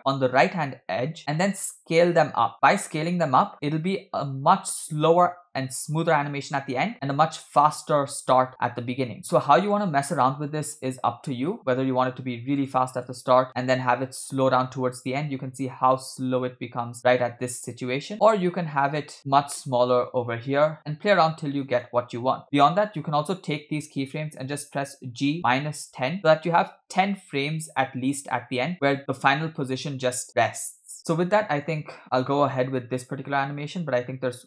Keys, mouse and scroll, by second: 1.3 s, 8.9 c, 9.2 space, 11.6 space, 12.8 click, 13.1 space, 18.8 space, 19.4 s, 25.1 g, 31.7 click, 32.0 space.